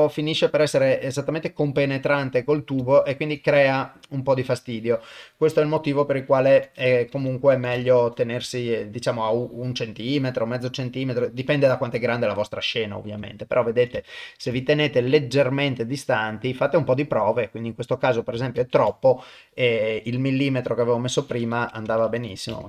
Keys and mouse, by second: 2.9 ctrl+middle click, 3.7 middle click, 5.5-8.0 drag, 8.5 ctrl+middle click, 9.3-11.8 drag, 12.1-13.2 middle drag, 13.3 ctrl+middle click, 14.0 shift+middle click, 14.5 ctrl+middle click, 15.1-17.3 middle drag, 17.6 middle click, 18.6 ctrl+z, 20.2-22.6 drag, 22.1 KP_0.